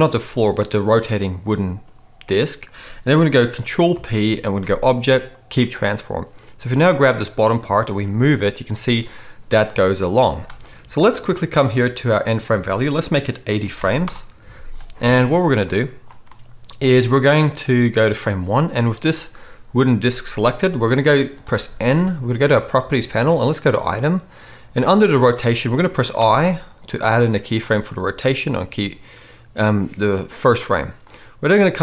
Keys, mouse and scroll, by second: 3.8 ctrl+p, 6.6 click, 6.7-12.2 middle drag, 7.9 g, 12.2-24.0 drag, 21.5 n, 24.0-31.0 middle drag, 26.2 i, 31.0-31.8 drag.